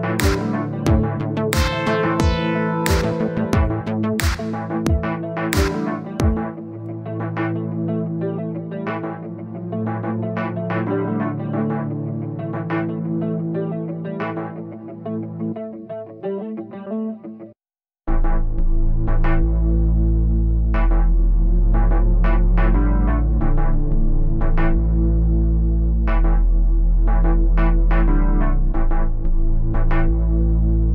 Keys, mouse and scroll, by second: 2.2 middle click, 2.8-3.2 scroll up 1, 3.3-4.5 drag, 4.8-6.7 drag, 8.8-10.2 drag, 10.2 middle click, 11.1 click, 12.0 click, 12.6-14.0 drag, 14.5 click, 15.3 middle click, 15.9-16.6 scroll down 2, 16.6-17.8 middle drag, 18.1-19.3 scroll up 1, 19.4-20.6 drag, 20.7-25.7 drag, 25.7 scroll up 4, 25.9 scroll down 3, 26.1-27.3 middle drag, 27.3-29.8 drag, 29.8-30.9 middle drag.